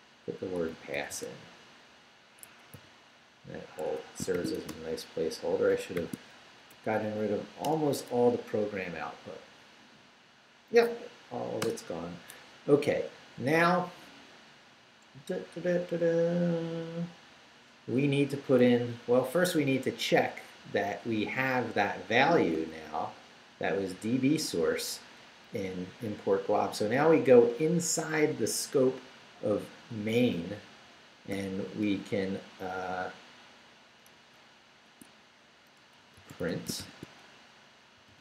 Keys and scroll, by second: 0.0-1.4 typing, 2.4 Escape, 2.7 n, 4.1-6.0 typing, 5.7 shift+Return, 6.5 shift+Up, 7.6 Return, 11.7 Return, 18.6 Up, 22.7 Down, 25.0 Up, 26.3 Down, 29.2 Down, 31.3 o, 34.1 Return, 34.5 Up, 34.9 Tab, 35.9-38.2 typing.